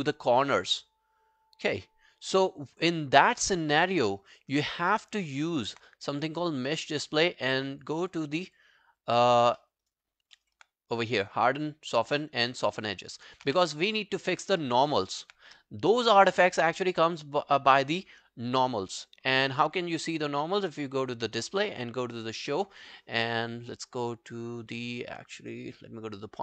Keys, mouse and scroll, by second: 3.6 alt+scroll down 1, 3.9 alt+middle click, 4.2 alt+right click, 4.6 alt+click, 4.9 alt+middle click, 5.2 alt+right click, 5.4 alt+click, 8.1 double click, 8.5 double click, 9.6 alt+middle click, 9.9 alt+right click, 10.1 alt+scroll down 6, 10.4 alt+middle click, 12.8 alt+middle click, 13.0 alt+right click, 13.2 alt+click, 13.5 q, 13.6 right click, 14.6 alt+middle click, 14.9 alt+right click, 15.1 alt+click.